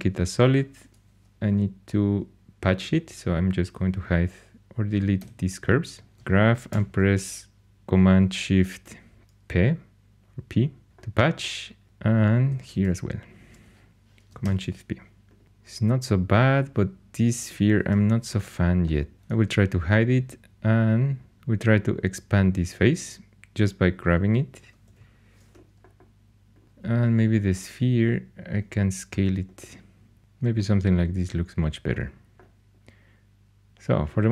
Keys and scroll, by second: 5.2 x, 6.0 2, 6.7 shift+super+p, 11.8 shift+h, 12.5 2, 14.4 shift+super+p, 17.9 4, 19.1 h, 21.3 3, 24.8 alt+h.